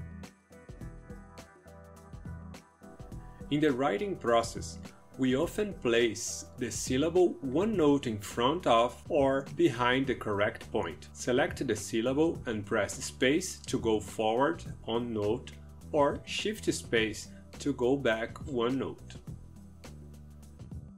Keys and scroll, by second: 0.0-2.3 typing, 4.0-7.5 typing, 13.9 space, 19.3 shift+space.